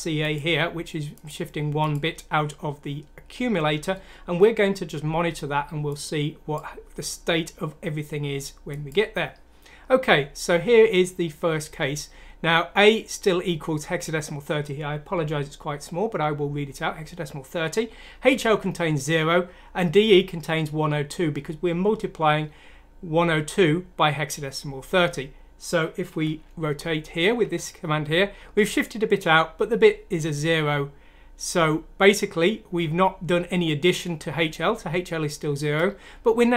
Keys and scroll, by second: 27.4 F7, 30.5 F7.